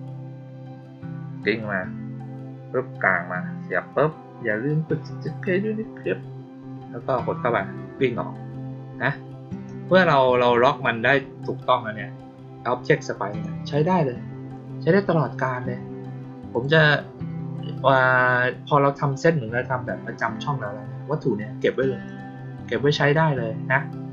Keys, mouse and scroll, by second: 9.4 click, 13.2 click, 16.4 click, 21.5 click, 22.0 click.